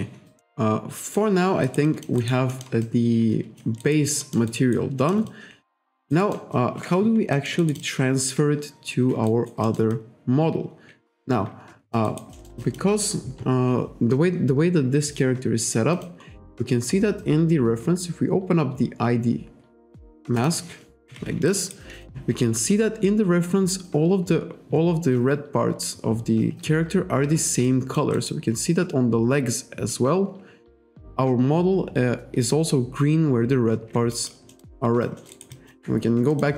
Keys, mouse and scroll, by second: 0.5 middle click, 1.7 alt+right click, 1.9 alt+click, 2.6 alt+middle click, 2.9 alt+click, 3.9 alt+right click, 4.3 alt+middle click, 5.1 alt+middle click, 5.4 alt+click, 6.1 alt+right click, 6.3 alt+middle click, 6.6 alt+click, 7.4 alt+middle click, 7.9 alt+click, 9.4 alt+right click, 9.7 alt+middle click, 10.0 alt+click, 16.0 click, 18.2-18.6 scroll down 1, 19.5-20.0 scroll down 1, 20.4 click, 21.6 alt+right click, 24.4-24.8 scroll up 1, 27.7 alt+click, 28.2 alt+right click, 34.2 alt+click, 34.6 alt+middle click, 34.9 alt+click, 35.3 alt+middle click, 35.4 alt+right click, 35.6 alt+click, 36.4 click.